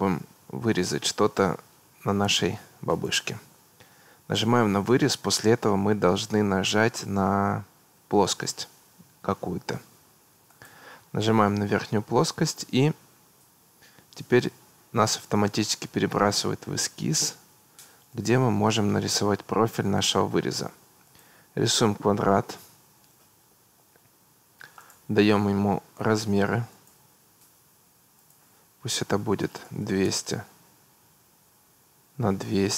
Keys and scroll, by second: 23.6 Escape, 29.4 2, 29.7 0, 30.1 Return.